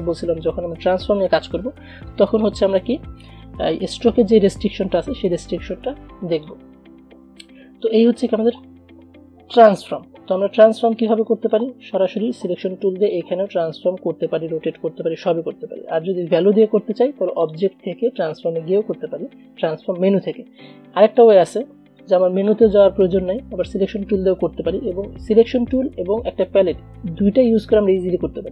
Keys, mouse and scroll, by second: 6.5 click, 7.6 v, 8.2-9.7 drag, 9.7 Delete, 11.2-13.1 drag, 17.6 click, 21.4-28.5 drag.